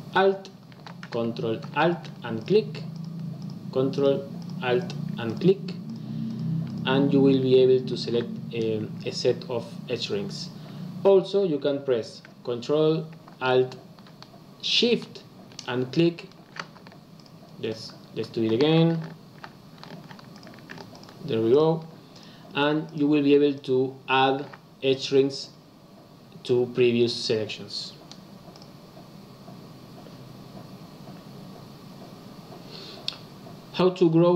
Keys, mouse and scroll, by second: 2.3 ctrl+alt+click, 2.9 ctrl+alt+click, 3.3 ctrl+alt+click, 3.9 ctrl+alt+click, 4.3 ctrl+alt+click, 4.7 ctrl+alt+click, 5.2 ctrl+alt+click, 5.8 ctrl+alt+click, 6.2 ctrl+alt+click, 6.6 ctrl+alt+click, 15.5 alt+shift+click, 17.1 alt+click, 20.2 ctrl+alt+click, 20.8 ctrl+alt+shift+click, 21.4 ctrl+alt+shift+click, 22.1 ctrl+alt+shift+click, 22.8 ctrl+alt+shift+click, 23.5 ctrl+alt+shift+click, 28.5 click.